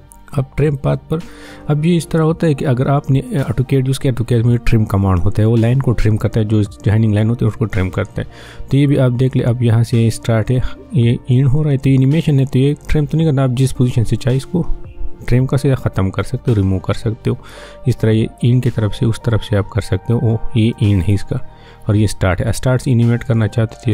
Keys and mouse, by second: 0.6 click, 9.2-23.4 drag, 23.4-23.9 drag.